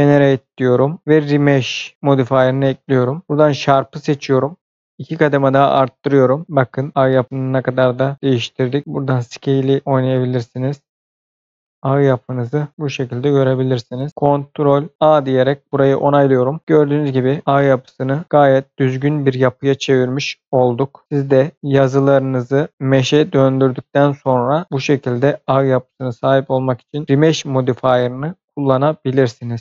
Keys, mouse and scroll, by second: 1.9 click, 3.3 click, 4.7 click, 5.8-6.4 scroll up 1, 9.3 click, 9.8 double click, 11.0 click, 12.7-13.6 scroll down 2, 12.9 middle click, 15.0 ctrl+a, 16.1 scroll down 1, 16.3 middle click, 16.6 scroll down 1, 16.8 middle click, 17.8 click, 18.2 middle click, 23.0 middle click, 25.4 middle click.